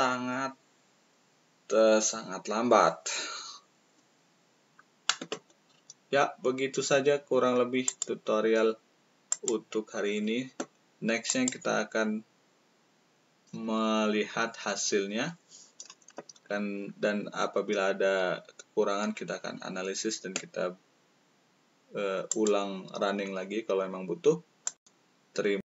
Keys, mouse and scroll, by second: 24.6-25.6 drag.